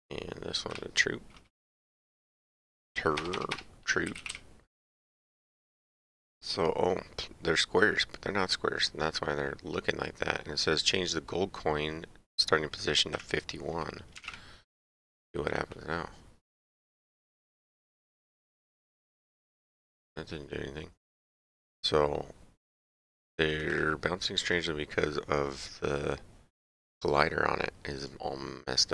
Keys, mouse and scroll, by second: 0.7 click, 3.2 BackSpace, 4.2 u, 14.2 KP_1, 23.5 click, 28.0 click.